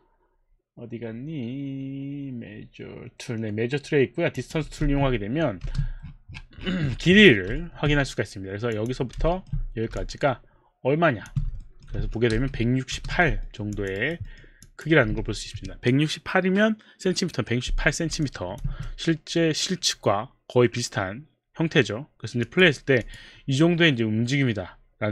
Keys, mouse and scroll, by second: 4.3 click, 4.8 click, 4.9 space, 5.7 space, 7.5 alt+middle click, 8.7 click, 9.0 click, 9.3 alt+middle click, 10.3 shift+click, 11.9 alt+middle click, 12.0 w, 12.4 space, 13.0 space, 13.4 alt+middle click, 13.8 alt+click, 14.0 alt+right click, 14.2 alt+middle click, 14.6 alt+click, 15.4 w, 15.6 w, 18.2 alt+click, 18.7 w, 22.4 click, 23.1 click, 23.4 click.